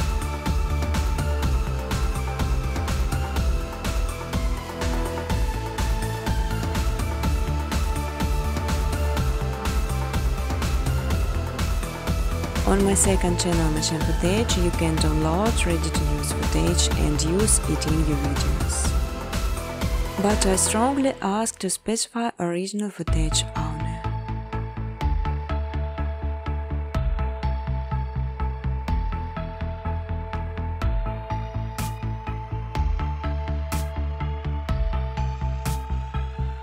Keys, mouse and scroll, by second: 0.4 space, 1.7 space, 2.2 space, 2.6 space, 4.8 click, 6.6 click, 8.2 click, 8.8 click, 11.9 click, 12.7 click, 16.3 click, 17.3-18.9 typing, 19.7 click, 20.3 space, 21.7-23.8 typing, 24.8 click, 25.9-29.2 typing, 32.1 Return, 32.2-33.0 typing, 34.0 space, 34.3 space, 36.0 space, 36.2 space.